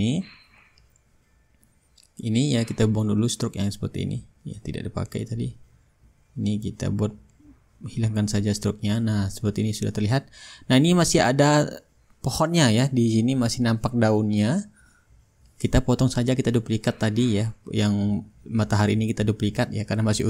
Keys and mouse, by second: 0.4-3.1 middle drag, 1.1-4.7 drag, 3.6-4.7 middle drag, 3.6-4.7 right drag, 4.7 Delete, 4.9-6.2 middle drag, 6.2-7.4 drag, 7.9-9.0 shift+drag, 9.1-13.0 drag, 15.3 ctrl+shift+g, 17.0-18.7 drag, 18.0 ctrl+z, 18.8 click, 20.0-20.2 drag.